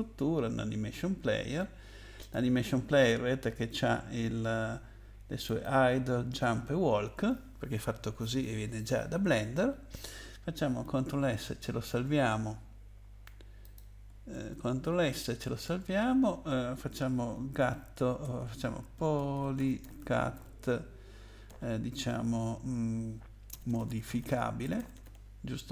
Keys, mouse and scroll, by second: 2.2 click, 5.5 click, 11.2 ctrl+s, 13.6 click, 14.3 ctrl+s, 17.6-20.3 typing, 21.5 -, 23.5-25.7 typing.